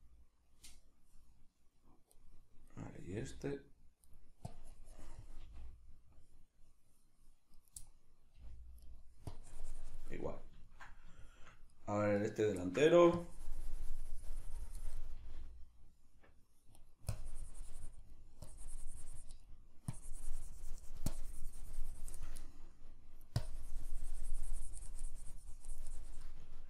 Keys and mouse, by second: 2.7 right click, 3.1 g, 4.1 right click, 4.5-7.7 drag, 5.5 g, 7.7 right click, 7.8-9.0 middle drag, 8.4 g, 9.0 right click, 9.3 click, 10.1-11.7 middle drag, 11.7 right click, 12.6 ctrl+shift+middle click, 13.2-16.9 drag, 15.2 g, 16.9 right click, 17.1-18.2 drag, 18.2 middle click, 18.5-19.5 drag, 19.5 middle click, 19.9-22.5 drag, 22.5 shift+middle click, 23.4-26.4 drag, 26.4 ctrl+middle click.